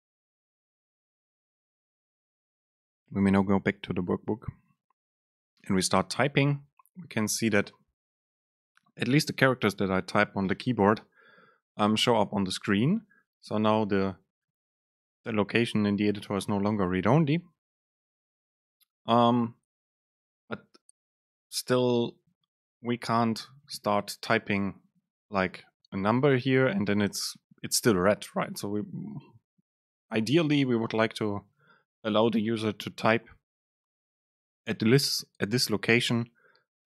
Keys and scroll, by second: 12.4 BackSpace, 13.6 Up, 17.9 BackSpace.